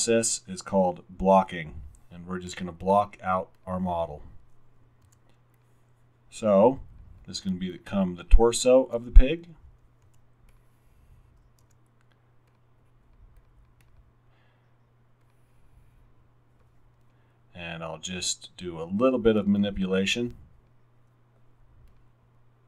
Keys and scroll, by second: 5.1 r, 10.1 w, 11.8 r, 12.3 r.